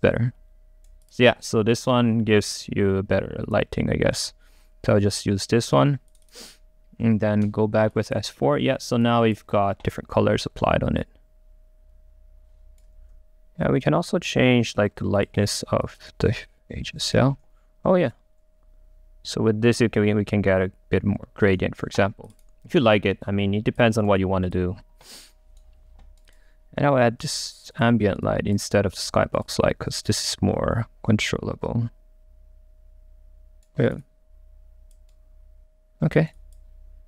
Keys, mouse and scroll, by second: 0.0-1.1 right drag, 1.1-5.3 drag, 5.3-6.3 right drag, 6.3 click, 11.1 right click, 11.9-12.9 right drag, 13.0 ctrl+z, 13.7-15.5 drag, 15.5 middle click, 15.9 click, 16.4 right click, 17.3 ctrl+z, 18.3-22.4 right drag.